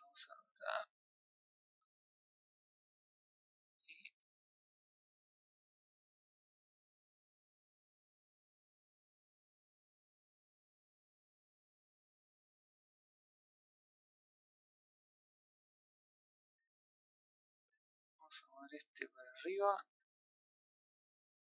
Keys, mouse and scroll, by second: 2.6 click, 6.2-9.1 middle drag, 9.1 click, 9.8-11.3 middle drag, 11.3-12.5 scroll up 1, 12.5 click, 16.1 scroll down 2, 16.3-18.9 middle drag, 18.9 click, 19.7 click, 21.3-21.5 middle drag.